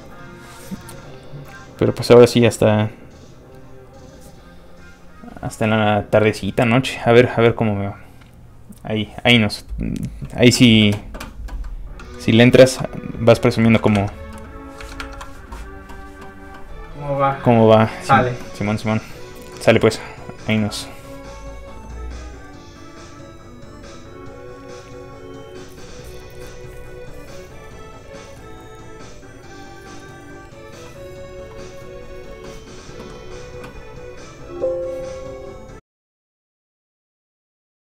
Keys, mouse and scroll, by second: 11.6 middle click, 12.4 scroll down 1, 12.5 shift+middle click, 13.4 scroll up 1, 13.6 shift+middle click, 13.8 alt+middle click, 13.9 alt+Tab, 22.5 Tab, 23.8 click.